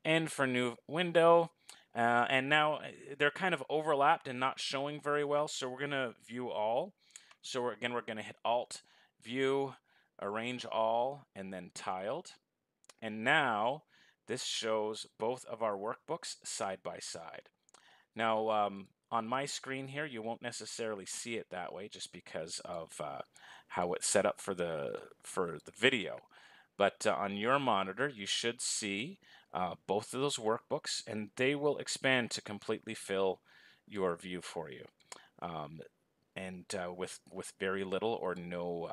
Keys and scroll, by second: 7.9 alt+a.